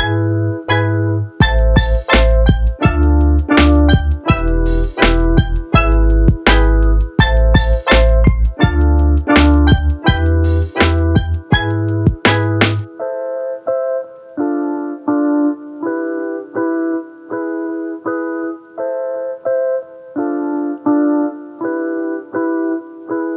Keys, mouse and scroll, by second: 1.3 shift+a, 4.1 shift+a, 8.0 click, 10.2 shift+t, 10.8 shift+t, 12.5-13.1 drag, 14.0 drag, 14.1-14.7 drag, 15.8 click, 20.3-22.5 drag.